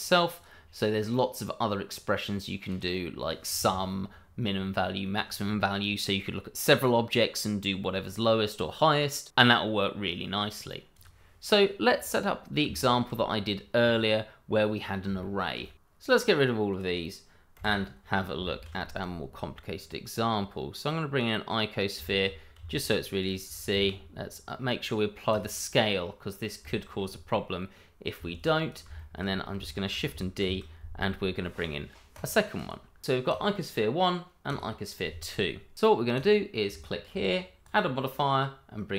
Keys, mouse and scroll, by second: 1.0 right click, 1.9 click, 10.9 click, 11.2 scroll down 1, 12.7 shift+middle click, 15.2 shift+middle click, 16.0 click, 17.5 Delete, 18.5 shift+a, 21.1 click, 22.0 shift+middle click, 22.5 s, 23.2 click, 23.7 ctrl+a, 25.3 click, 26.6 shift+middle click, 28.7 click, 28.9 shift+middle click, 29.3 scroll down 1, 29.6 shift+middle click, 30.4 shift+d, 32.1 click, 32.5 double click, 33.2 click, 36.1 click, 36.8 shift+middle click, 37.6 click.